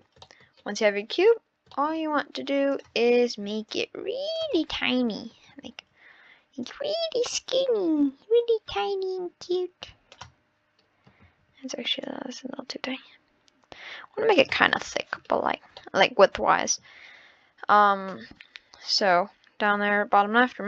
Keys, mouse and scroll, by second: 0.2 middle drag, 0.6 scroll down 10, 1.4-1.7 scroll up 11, 1.7 middle click, 2.0-2.4 scroll down 1, 2.7-3.7 drag, 4.6-5.7 middle drag, 5.7 ctrl+z, 6.6 click, 11.2 ctrl+z, 12.0 click, 14.5 scroll up 1, 14.6-15.3 middle drag, 15.3-15.7 scroll down 1, 15.8-18.8 middle drag.